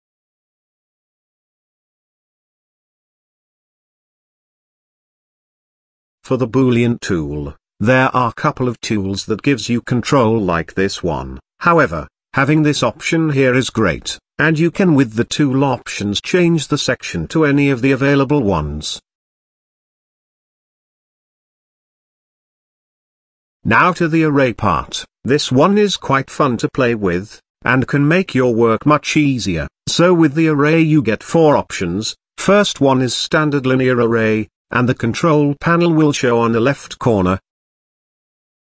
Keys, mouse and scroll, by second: 0.5-0.8 scroll down 2, 0.8-2.5 middle drag, 3.0-3.5 drag, 3.5-4.0 middle drag, 4.0 scroll up 4, 4.2-5.0 middle drag, 5.0 scroll up 2, 6.3 j, 10.5 click, 13.6 Tab, 14.4-15.4 middle drag, 15.4 drag, 15.6 s, 16.9 click, 17.2-18.2 middle drag, 18.2 j, 19.3 click, 22.8 n, 24.6 j, 35.6-38.1 drag, 38.1-38.7 middle drag.